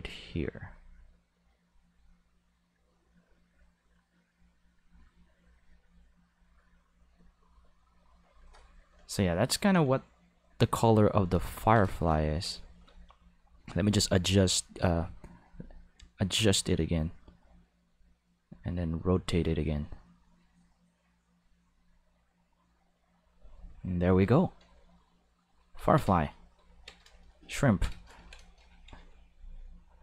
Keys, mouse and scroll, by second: 13.7 click, 15.4-16.9 drag, 18.4-24.0 drag, 25.8 ctrl+s, 27.7 ctrl+middle click, 28.0 middle click.